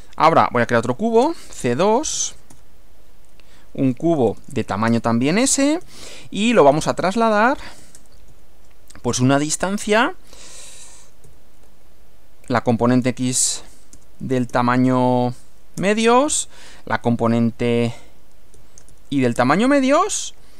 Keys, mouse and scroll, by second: 0.4-3.1 typing, 4.2-9.2 typing, 10.8 s, 11.3 ., 12.4 x, 14.0 BackSpace, 14.6 shift+7, 15.6-20.4 typing.